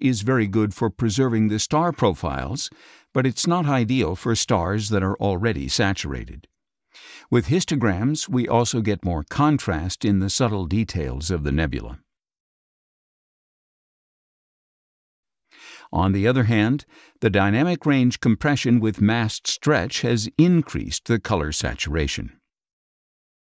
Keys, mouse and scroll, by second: 4.1 space, 4.2-5.3 drag, 7.5 scroll up 2, 8.1 space, 8.2-9.2 drag, 10.4 ctrl+shift+z, 11.9 ctrl+shift+z, 12.4 ctrl+shift+scroll down 1, 13.0 ctrl+shift+z, 14.0 ctrl+shift+z, 15.1 ctrl+shift+z, 15.9 ctrl+shift+z, 17.2-18.0 scroll up 3, 18.3 scroll up 2, 19.5 ctrl+shift+z, 21.5 ctrl+shift+z, 22.6 ctrl+shift+z.